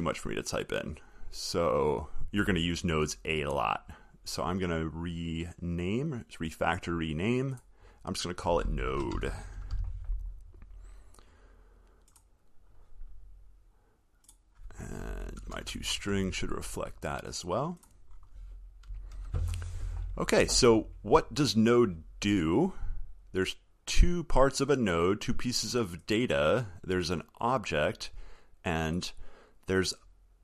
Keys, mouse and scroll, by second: 19.4 ctrl+s.